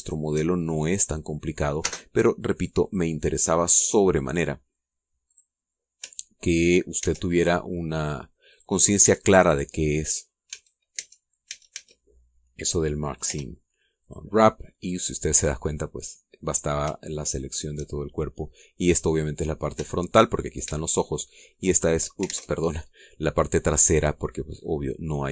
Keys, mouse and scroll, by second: 0.4 a, 0.9 alt+shift+right click, 1.5 alt+shift+scroll down 2, 1.8 middle click, 2.8 space, 3.8 click, 6.3 click, 8.0 ctrl+e, 9.5 click, 10.0 Tab, 10.4 scroll down 1, 10.7 scroll up 1, 11.2 scroll down 1, 11.5 a, 11.5-12.9 drag, 11.9 Tab, 12.5 a, 14.3 u, 15.0 click, 15.9-16.3 scroll down 1, 16.5-17.5 scroll up 3, 18.1 shift+right click, 18.3 shift+middle click, 18.7 shift+right click, 21.7 shift+middle click, 22.5 shift+right click, 22.5 shift+middle click, 23.3 alt+shift+Tab, 23.9-24.4 scroll down 3, 24.6 click.